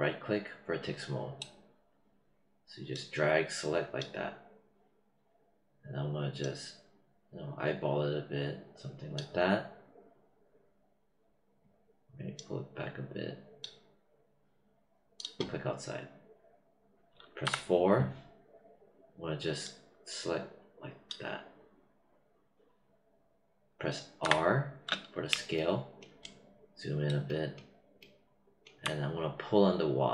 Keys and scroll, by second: 24.2 r.